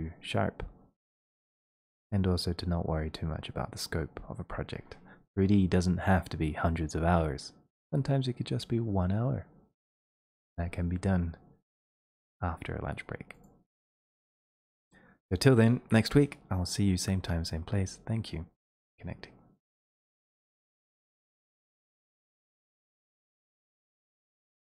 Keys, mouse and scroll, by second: 1.4-6.5 drag, 11.9 click, 19.7 click.